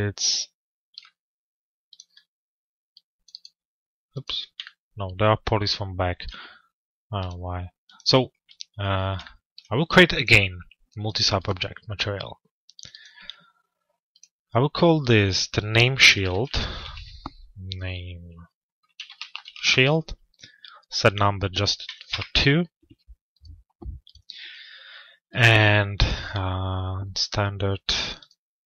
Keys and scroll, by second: 19.1 Return.